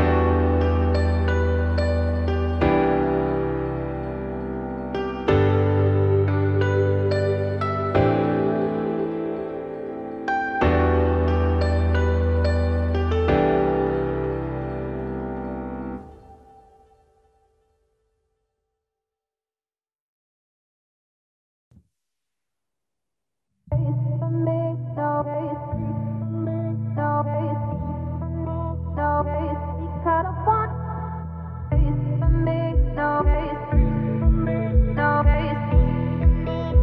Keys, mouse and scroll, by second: 0.5 click, 3.5 z, 4.3-4.6 scroll up 1, 4.6-6.2 shift+middle drag, 6.2 click, 6.6-8.0 shift+middle drag, 8.0-13.0 drag, 13.9-15.5 drag, 15.5-15.9 scroll up 1, 15.9 shift+middle drag, 16.2-17.2 scroll up 4, 17.2-18.0 scroll up 1, 18.0 click, 19.6 click, 20.8-22.3 drag, 22.3-22.7 scroll down 1, 22.7 shift+middle click, 22.8 shift+middle drag, 23.0-23.5 scroll up 3, 23.5 click, 23.9-25.9 shift+middle drag, 25.9-26.7 drag, 29.4 click, 30.0-30.4 scroll down 2, 30.4 shift+middle drag, 30.6-31.9 scroll up 8, 31.1 shift+middle drag, 31.9 click, 32.2-35.4 shift+middle drag, 35.4-36.8 drag.